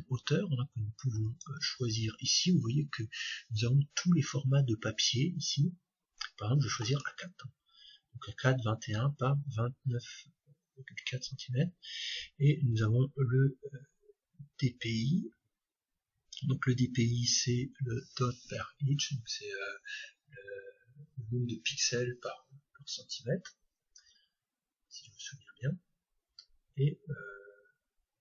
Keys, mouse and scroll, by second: 1.2-3.2 drag, 24.3-26.8 middle drag.